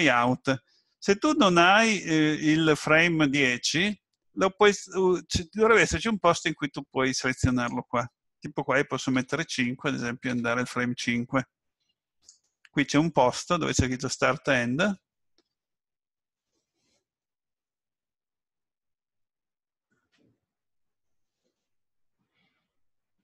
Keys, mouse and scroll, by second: 7.4 click.